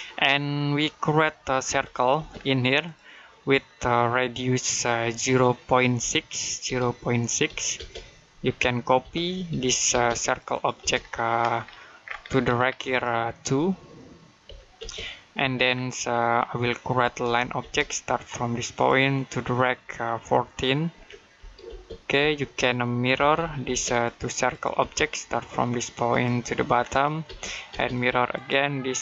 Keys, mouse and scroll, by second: 0.1 middle click, 1.5 c, 2.0 space, 2.7 click, 5.8 typing, 7.1-7.8 typing, 8.9-10.6 typing, 10.1 click, 10.8-12.2 scroll up 1, 12.2 middle click, 12.7 click, 14.3-14.6 typing, 15.6-16.0 scroll down 1, 16.0 middle click, 17.1 l, 17.5 space, 18.6 click, 20.8-21.5 typing, 22.8-24.6 typing, 23.7 click, 25.9 click, 27.1 space, 27.8 click.